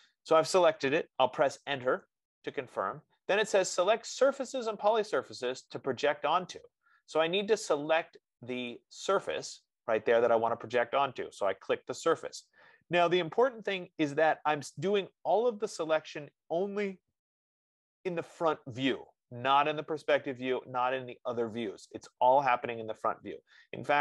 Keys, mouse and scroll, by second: 2.2 Return, 9.1-14.0 drag.